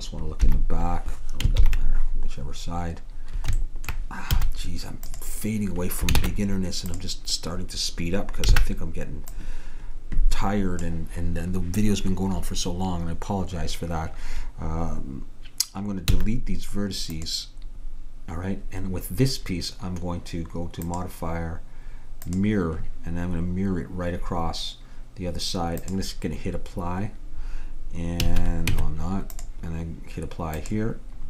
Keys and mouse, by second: 0.5 KP_1, 1.7 ctrl+KP_1, 4.4 z, 6.3 ctrl+Tab, 8.6 b, 16.1 x, 20.9-22.7 drag, 25.8-27.6 drag, 28.3 a, 28.8 Tab, 30.7-31.2 drag.